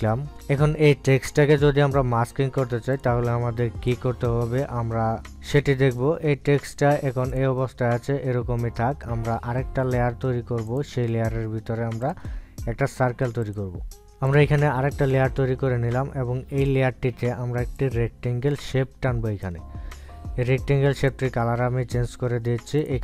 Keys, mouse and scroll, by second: 0.1 e, 3.6-7.3 drag, 11.3 click, 15.0 click, 17.3-21.7 drag.